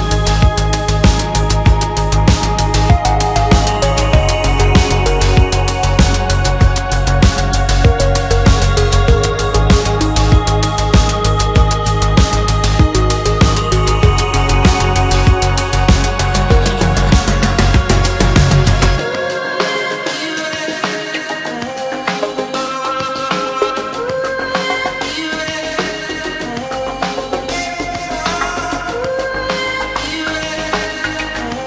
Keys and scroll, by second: 9.1 space, 9.2 Escape, 10.5 space, 10.5 Escape, 16.1 shift+m, 18.7 shift+space.